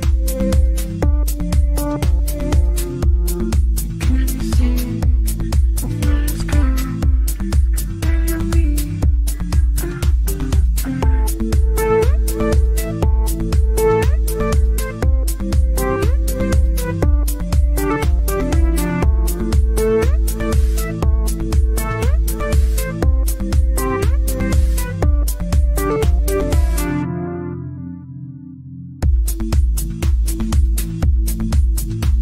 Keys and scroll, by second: 14.0 F3, 14.2 Escape.